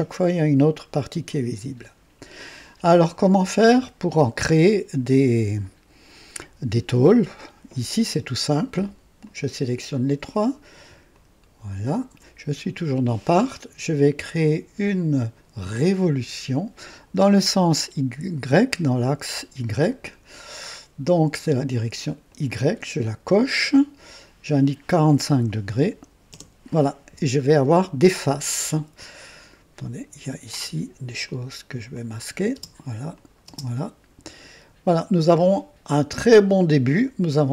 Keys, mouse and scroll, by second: 1.2 click, 9.2 click, 11.1 ctrl+click, 11.9 ctrl+click, 16.1 click, 22.3 click, 24.1 click, 25.3 KP_4, 25.6 KP_5, 26.3 KP_Enter, 30.5 click, 31.2 click, 31.9 click, 32.5 space, 33.1 click.